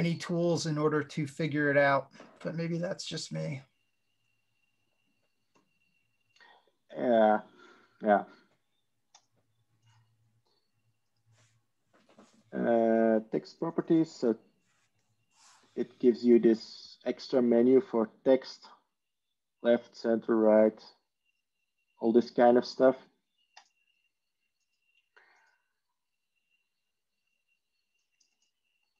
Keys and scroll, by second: 28.8 ctrl+e.